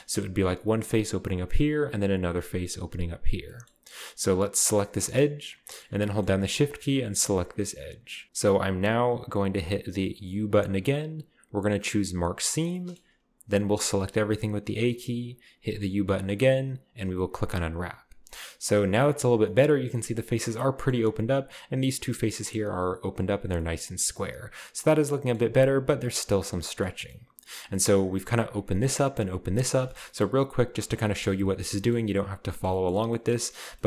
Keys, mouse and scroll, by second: 3.7-4.4 scroll up 2, 4.4 scroll up 1, 4.7 right click, 6.0-7.1 scroll up 4, 6.4-7.1 shift+middle drag, 7.1 shift+right click, 10.5 u, 12.2 click, 12.7-13.8 middle drag, 14.0 a, 14.2 a, 15.6 u, 17.3 click, 18.0-18.5 scroll down 3, 18.6-20.2 scroll up 3, 22.7-23.4 scroll up 1, 23.4-24.3 scroll down 1, 25.3-26.2 scroll up 2, 26.2-26.7 scroll up 1, 26.9-28.9 scroll down 2, 29.4 middle click, 29.8-30.8 shift+middle drag, 30.8-31.5 typing, 32.2 right click, 32.6-33.8 scroll up 1.